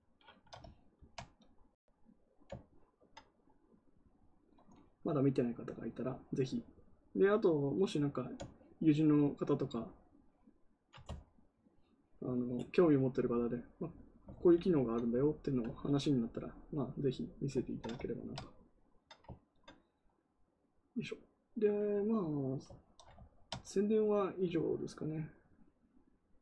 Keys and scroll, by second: 14.2 ctrl+z.